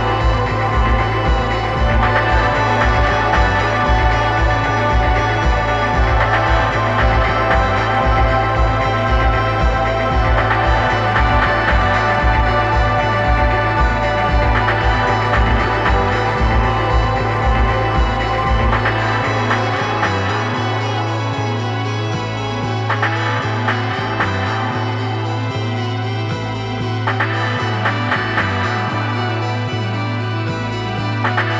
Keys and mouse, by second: 0.0-1.6 drag, 7.2 middle click, 15.4-16.8 drag, 24.3 click, 25.7-27.7 drag.